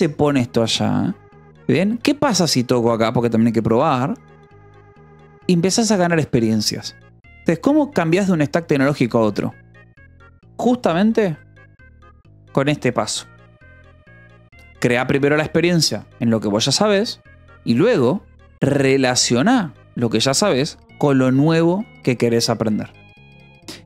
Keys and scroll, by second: 11.3-12.5 typing.